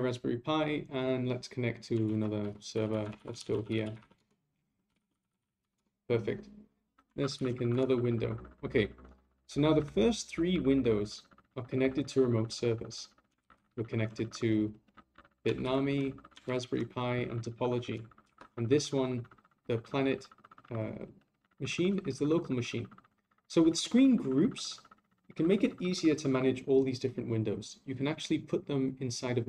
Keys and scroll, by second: 2.0 ctrl+a, 7.3 ctrl+a, 13.4 ctrl+Left, 15.6 ctrl+Right, 18.2 ctrl+Right.